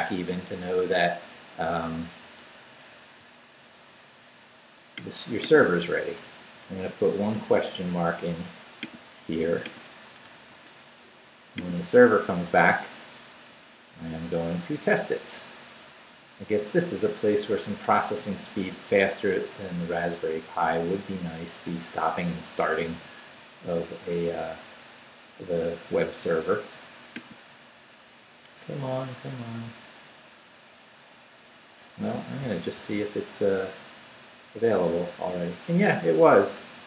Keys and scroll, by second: 6.4 shift+/, 7.3 shift+BackSpace, 10.3 shift+/, 11.1 shift+Return, 32.4 super+r.